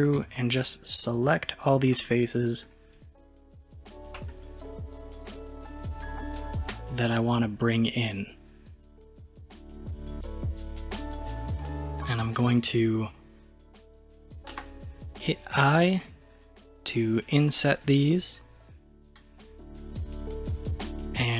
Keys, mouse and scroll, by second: 0.2 shift+click, 0.7 shift+drag, 1.2 shift+click, 1.6 shift+click, 2.1-3.3 middle drag, 3.3 shift+drag, 3.7 shift+click, 4.0 shift+click, 4.3-5.2 middle drag, 5.2 shift+click, 5.6 shift+drag, 6.1 shift+click, 6.5 shift+click, 6.9-9.9 middle drag, 10.8-11.6 scroll up 1, 11.6-14.5 middle drag, 14.5 i.